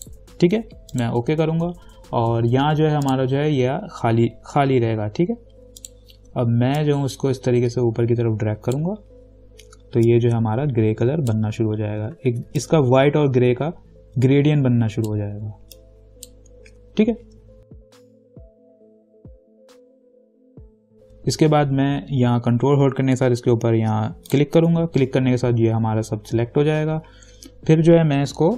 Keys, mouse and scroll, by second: 3.3 click, 6.0-12.5 drag, 7.3-10.3 drag, 10.6-12.4 drag, 12.5 ctrl+z, 13.1-16.0 drag, 16.3-18.1 drag, 24.5 ctrl+click.